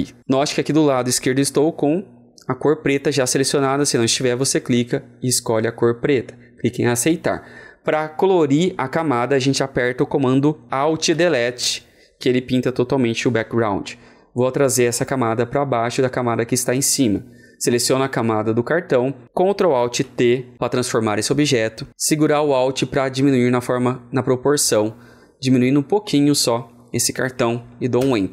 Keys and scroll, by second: 10.8 ctrl+a, 11.0 alt+Delete, 19.9 ctrl+alt+t, 22.4 ctrl+alt+t, 27.9 alt+Return.